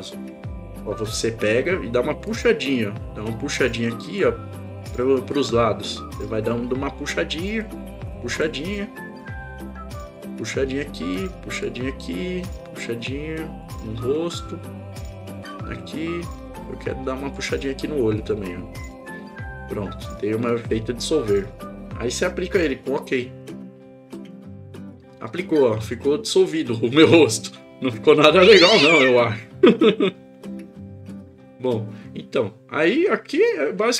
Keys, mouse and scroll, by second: 2.3-4.2 drag, 5.3-6.7 drag, 7.6 click, 9.3 click, 11.4 click, 12.6-13.8 drag, 14.9 click, 16.7 click, 18.3 click, 24.3 click.